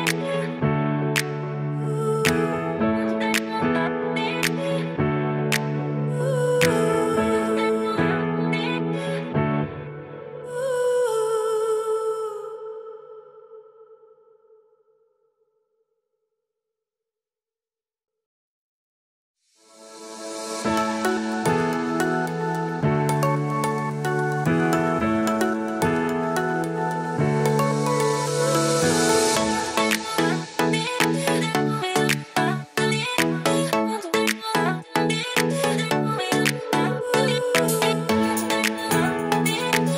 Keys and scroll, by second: 2.5 super+c, 3.3 super+v, 6.8 super+c, 7.4 super+v, 8.1 super+s, 27.4 super+Right.